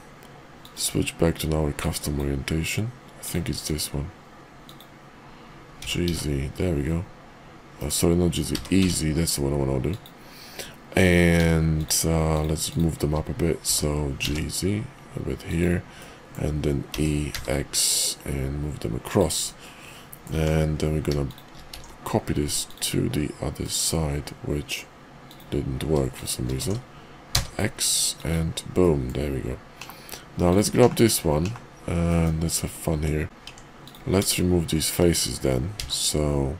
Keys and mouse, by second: 0.5-2.4 drag, 3.2 click, 3.5-5.0 drag, 5.7 g, 8.5 e, 11.0 click, 11.6 shift+click, 13.5 g, 16.0 click, 16.8 e, 19.4 click, 19.9 middle click, 20.3 Tab, 21.6 alt+x, 22.7 click, 23.5-24.7 middle drag, 26.5 alt+x, 28.2 click, 28.7-29.1 middle drag, 30.5 click, 30.8 /, 31.3 /, 32.1 middle drag, 32.9 Tab, 33.4 Tab, 33.8 click, 35.7 x.